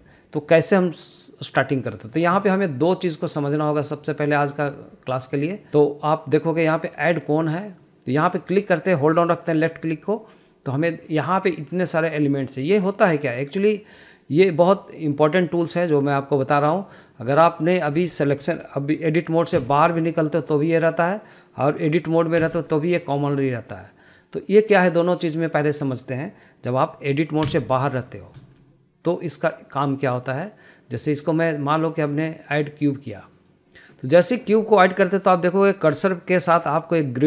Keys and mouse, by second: 8.5-17.6 drag, 18.1 middle click, 18.6 shift+middle drag, 19.1 shift+middle click, 20.1 Tab, 23.0 Tab, 28.0 Tab, 28.6 middle click, 28.9 shift+middle click, 31.7-34.1 drag, 34.5 middle click, 35.1 shift+middle click.